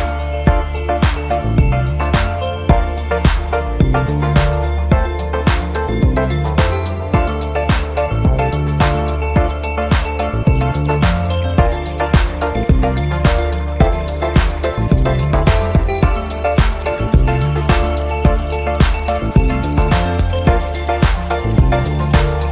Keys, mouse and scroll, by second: 0.5 click, 1.9-2.4 drag, 2.9 drag, 6.1 click, 7.2 click, 8.3-8.9 scroll up 1, 8.9-9.8 scroll down 2, 9.8-11.2 scroll up 1, 11.2 click, 12.5-15.5 middle drag, 18.2 click, 19.1-20.1 scroll down 2, 20.1-22.5 middle drag.